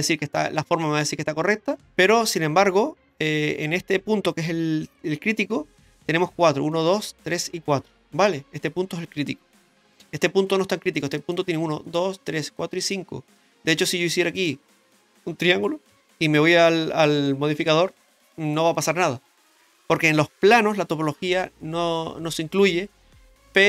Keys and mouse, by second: 2.2 Tab, 3.1 Tab, 4.3 click, 11.2 right click, 11.8 shift+right click, 12.2 shift+right click, 12.4 shift+right click, 12.8 shift+right click, 13.9 middle click, 15.9 k, 15.9 Tab, 17.6 click, 18.0 middle drag.